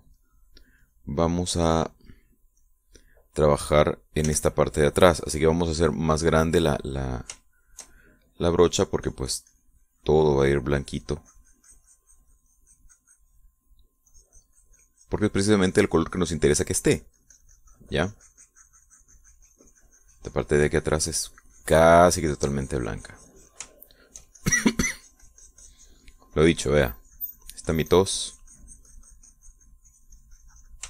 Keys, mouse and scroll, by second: 0.4 click, 1.3 click, 2.0-3.1 drag, 3.8 click, 5.4 f, 6.4 click, 8.6 shift+middle click, 9.7-10.9 shift+drag, 11.5-14.7 drag, 14.9-24.8 middle drag, 15.2-24.8 drag, 25.0 shift+middle click, 25.6-30.8 shift+drag.